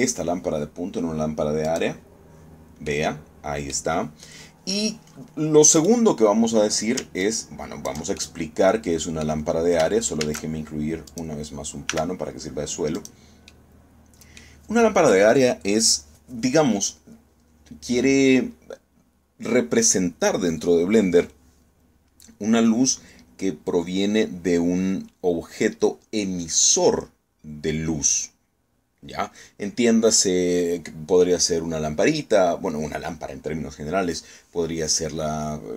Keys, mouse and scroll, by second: 2.3 click, 3.5-4.6 middle drag, 6.4 right click, 7.9 ctrl+click, 8.8 ctrl+click, 9.0-10.1 ctrl+middle drag, 10.9 shift+a, 11.8 click, 12.6 s, 13.6 click, 14.2-15.2 drag.